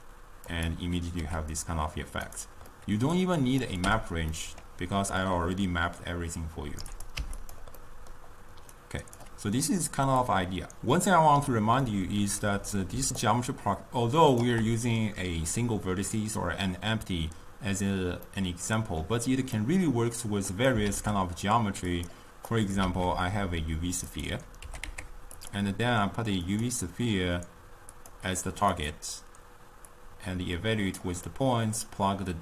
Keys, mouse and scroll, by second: 1.5 g, 3.0-3.7 middle drag, 3.7 click, 3.9 m, 4.4 middle click, 5.3-7.6 drag, 8.1-8.8 middle drag, 8.8 click, 10.3 click, 12.1 middle click, 13.0 d, 13.2-14.5 right drag, 14.5 d, 14.6 d, 14.7 d, 18.4-20.6 middle drag, 20.6 click, 20.9 shift+d, 22.6 click, 22.9 shift+a, 24.8 g, 26.7 click, 28.0 click, 30.0-31.4 drag, 31.4-32.4 middle drag.